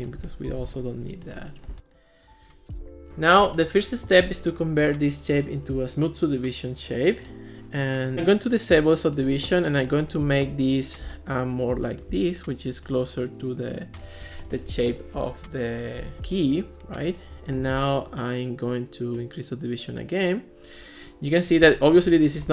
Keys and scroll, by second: 0.5 alt+p.